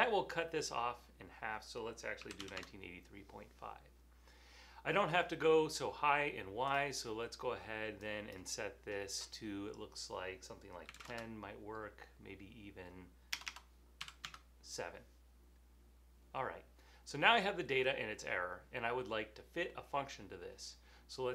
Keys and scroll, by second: 2.2-2.9 typing, 5.4-6.2 typing, 10.8-11.6 typing, 13.5-14.6 typing.